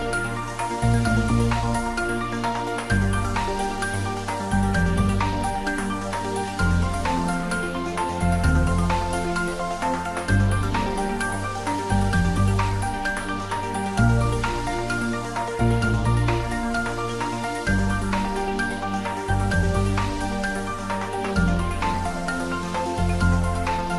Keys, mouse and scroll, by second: 1.1 click, 2.7 click, 6.4 click, 10.1 click, 13.0-15.7 scroll up 1, 19.8 click, 21.9 click, 23.4 click.